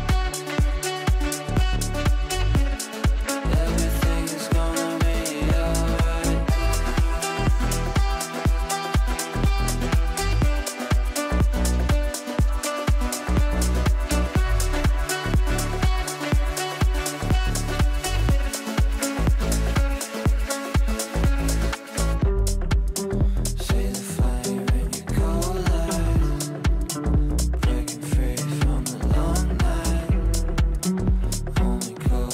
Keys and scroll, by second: 5.8 ctrl+z, 8.4 shift+F2, 8.8 Escape, 16.7 shift+F2, 17.2 Escape.